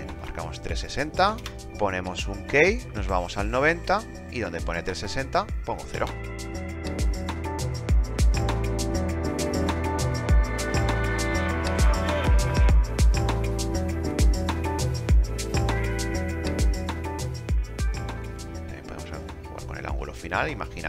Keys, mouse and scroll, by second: 0.0 KP_6, 0.1 KP_0, 0.8 Return, 5.2 KP_0.